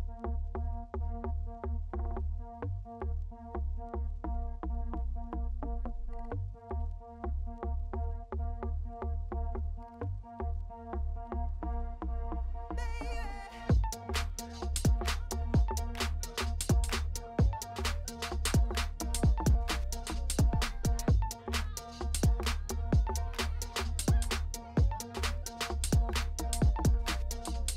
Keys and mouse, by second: 0.4 shift+d, 3.3 click, 8.9-10.2 drag, 13.1 i, 14.3 click, 16.1 i, 18.6 s, 22.0 i, 22.5 space, 23.9 space, 25.1 ctrl+s, 25.6-27.6 drag.